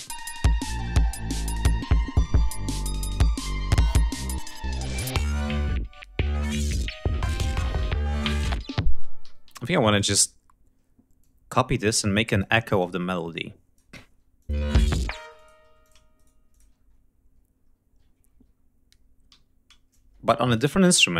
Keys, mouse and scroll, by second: 2.4-3.2 ctrl+scroll up 5, 6.4 ctrl+scroll down 2, 7.4 ctrl+scroll up 2, 8.6 space, 8.9 g, 9.1 ctrl+scroll down 2, 9.5 ctrl+click, 10.9-12.3 ctrl+drag, 12.4 ctrl+click, 13.6 ctrl+scroll up 2, 14.0 ctrl+click, 14.2 ctrl+space, 14.8 space, 15.0 click, 15.3 s, 15.5 shift+click, 15.8 shift+right click, 16.2 ctrl+shift+click, 16.5 ctrl+shift+scroll down 2, 17.3-18.1 scroll up 4, 18.2 ctrl+scroll down 2, 19.0 e, 19.6-20.4 shift+drag, 20.5 Delete.